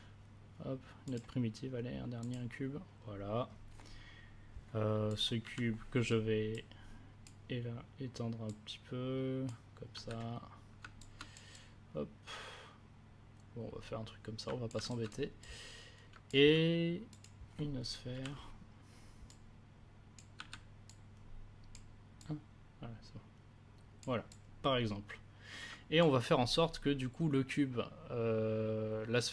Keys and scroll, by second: 5.4 r, 9.9 w, 18.1 r, 20.3 w.